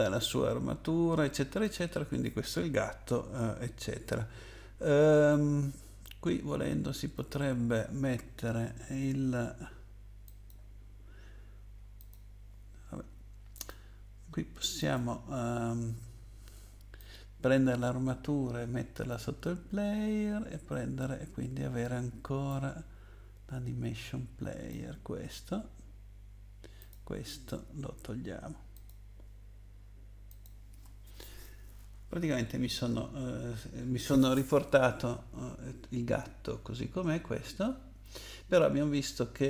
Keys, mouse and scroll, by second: 1.6 click, 7.1 click, 10.2 click, 12.0 click, 13.5 click, 14.8 click, 17.0 click, 22.5 click, 26.8 click, 27.3 right click, 28.7 click, 30.3 click.